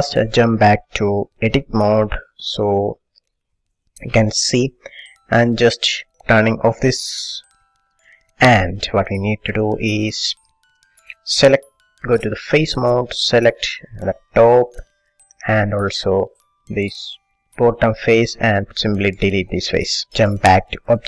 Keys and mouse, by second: 3.6-7.7 middle drag, 7.7 click, 8.2-9.8 middle drag, 10.6-12.3 middle drag, 12.5-13.9 drag, 13.9 middle click, 15.0 middle click, 15.1 click, 15.3-17.6 middle drag, 17.6-19.2 drag, 19.3 Delete, 20.0 middle click.